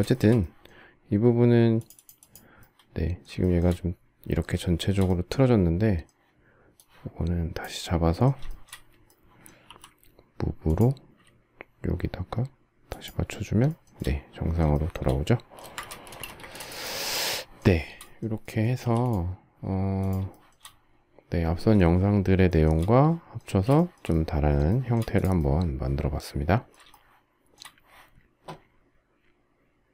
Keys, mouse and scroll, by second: 3.1 shift+middle click, 4.3 shift+middle click, 4.6-5.8 shift+scroll, 8.2 shift+middle click, 9.4 m, 12.6 shift+click, 13.4 shift+middle click, 13.7 shift+middle click, 14.4 shift+middle click, 15.3 space, 15.5 Escape, 15.9 space, 16.1 Escape, 17.5 shift+middle click, 18.5 m, 20.0 shift+middle click, 22.2 shift+middle click, 22.5 shift+middle click, 23.1 space, 23.6 shift+middle click, 24.4 shift+middle click, 26.6 shift+middle click.